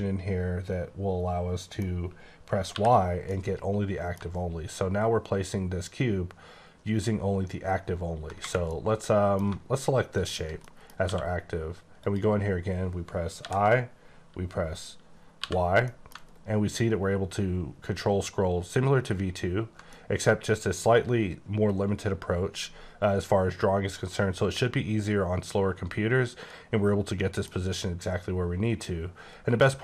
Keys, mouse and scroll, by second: 2.8 y, 3.3 middle click, 4.6-6.8 ctrl+scroll down 8, 6.8-7.7 ctrl+scroll up 2, 7.7-8.4 ctrl+scroll up 2, 8.6 middle click, 10.2 shift+click, 10.6 middle click, 11.9 click, 13.4 i, 15.4 y, 15.9 middle click, 16.4-17.4 ctrl+scroll down 4, 17.4-19.3 ctrl+scroll up 8, 19.9 middle click.